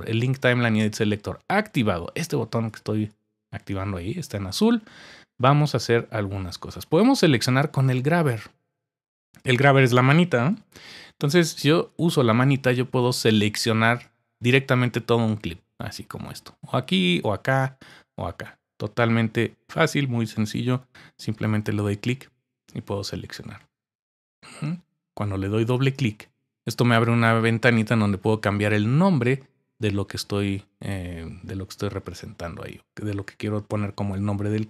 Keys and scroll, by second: 10.4-11.9 typing.